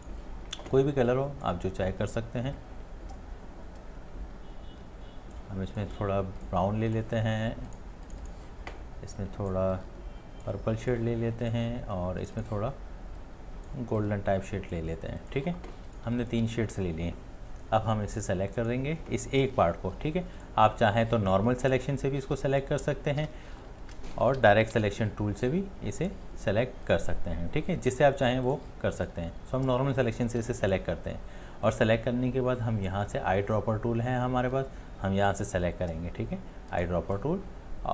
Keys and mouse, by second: 16.1 space, 23.2 space, 24.4 ctrl+z.